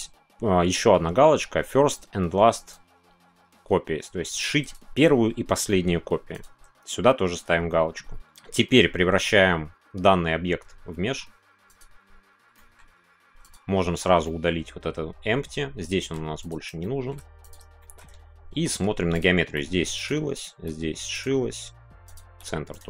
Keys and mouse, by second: 9.8-11.8 right drag, 12.5 middle click, 13.4-14.2 drag, 14.2-16.7 middle drag, 16.8 middle drag, 17.7 middle click, 18.5 Tab, 20.0 right click, 20.0 g, 20.5 g, 21.1 right click, 22.1 click, 22.3 g, 22.7 right click.